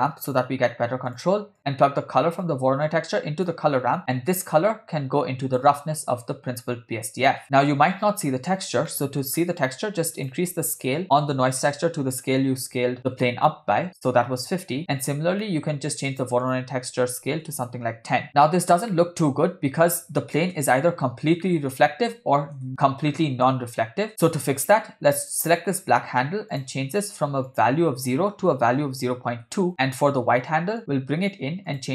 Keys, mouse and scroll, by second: 2.5-3.6 drag, 4.3-5.8 drag, 8.9 middle click, 9.4-10.2 scroll up 2, 10.2-13.3 drag, 15.4 middle click, 16.5-17.8 drag, 18.3 scroll up 3, 19.0-19.5 middle drag, 20.0-20.5 scroll down 1, 20.5 scroll down 1, 20.5 KP_0, 21.5-21.8 middle drag, 22.6 KP_0, 23.2-23.6 shift+middle drag, 23.8 scroll up 3, 24.1-24.5 scroll down 4, 25.2 click, 26.6 click, 30.8-31.4 drag, 31.7 click.